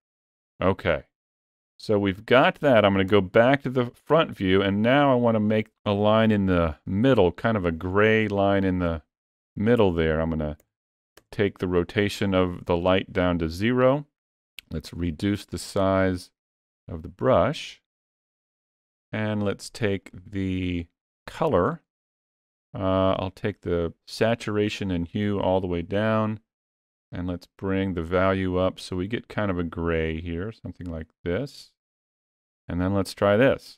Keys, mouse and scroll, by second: 2.9 KP_1, 8.6 click, 14.1 f, 19.8 middle click, 21.5 click.